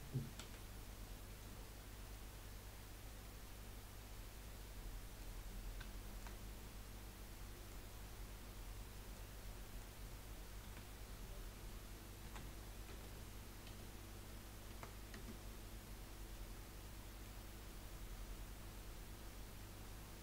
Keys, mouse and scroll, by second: 0.4 KP_1, 2.1-5.2 middle drag, 5.4-5.7 scroll down 4, 5.9-7.7 shift+middle drag, 7.7-8.4 scroll up 2, 8.9-10.6 middle drag, 10.6 a, 12.2 r, 16.3-17.4 middle drag, 17.4 scroll up 2, 17.7-20.2 middle drag.